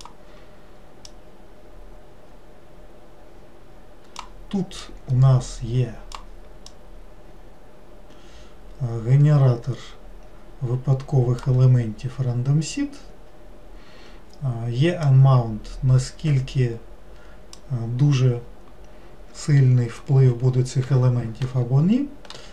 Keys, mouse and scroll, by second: 1.1-4.1 drag, 4.9-9.8 drag, 15.1-18.1 drag.